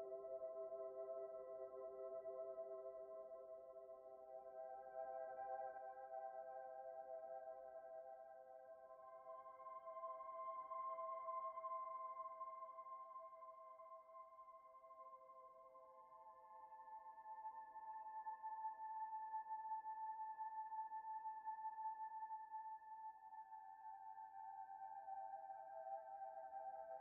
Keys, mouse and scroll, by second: 1.8-2.6 typing, 4.5 Return, 6.2-8.0 typing, 7.1 Return, 8.6 Return, 10.0 typing, 10.9 Return, 11.4 typing, 12.6 Return, 14.0 typing, 15.2 Return, 16.8 typing, 17.4 right click, 18.5-19.5 typing, 19.1 Return, 20.6 Return, 24.2-24.7 scroll down 1, 24.7-25.5 scroll up 1, 25.6 shift+middle click.